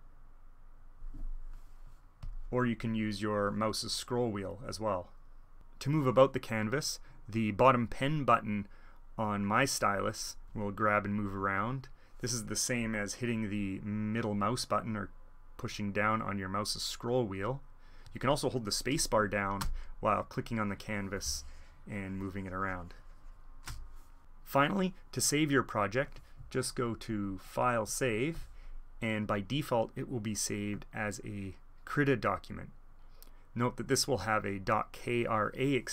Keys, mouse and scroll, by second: 0.7 click, 2.2-3.7 drag, 3.7-4.4 scroll up 1, 4.4-5.1 scroll down 2, 5.1-5.5 scroll up 2, 9.2 middle click, 9.3 click, 9.8 middle click, 10.2 middle click, 10.4 click, 11.0 click, 11.1 click, 12.3-14.6 drag, 15.0 click, 15.9 click, 16.5 click, 17.3-18.4 drag, 19.9 space, 20.1 space, 20.2 click, 20.2 space, 20.3-21.4 space, 20.9 click, 21.1 click, 21.4 click, 21.9 click, 22.3 click, 22.9 click, 23.4 click, 27.0-28.3 drag.